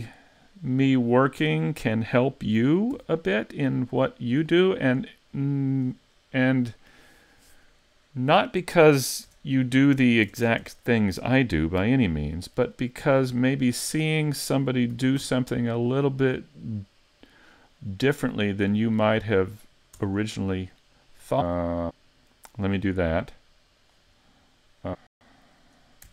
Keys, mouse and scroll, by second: 1.4 click, 2.9 s, 4.4 click, 9.3 Tab, 10.3 ctrl+Tab, 12.1 alt+right click, 13.5 alt+shift+right click, 14.9 s, 19.3 click, 20.0 Tab, 21.0 click, 22.7 scroll up 2, 23.6 middle click, 23.9 click, 24.2-24.9 scroll down 1, 24.9 scroll down 1.